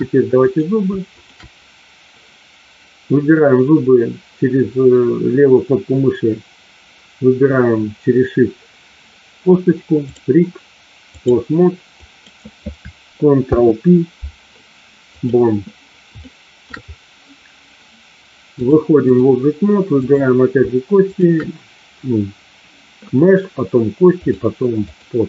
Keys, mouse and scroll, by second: 0.5 click, 1.1 shift+click, 10.1-11.2 drag, 12.1 click, 13.3 ctrl+p, 16.2 shift+middle click, 18.6-19.2 drag, 19.8 click, 24.2-25.1 drag.